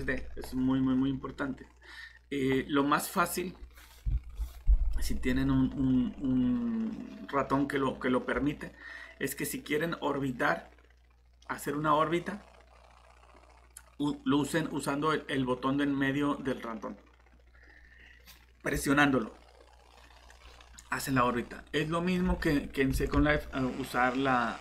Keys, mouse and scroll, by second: 0.9-1.8 scroll down 1, 1.8-3.3 scroll up 1, 11.4 middle click, 22.3 alt+Tab, 23.2 Tab.